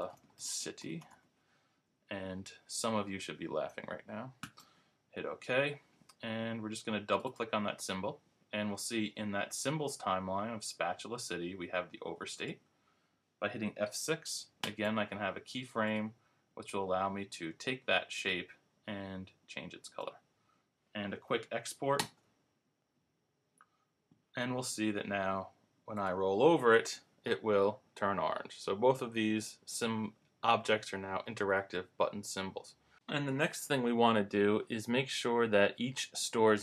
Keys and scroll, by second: 0.0-2.0 typing, 14.6 F6, 22.0 super+Return.